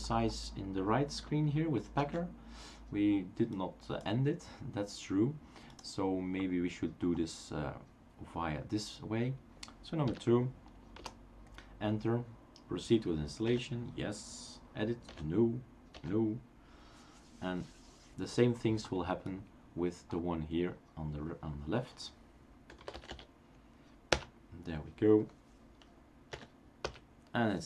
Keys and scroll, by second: 2.0 shift+super+q, 10.1 typing, 10.9 Return, 13.5 typing, 15.2-15.9 typing, 22.5-23.6 typing, 24.1 Return, 26.5 y, 26.8 Return.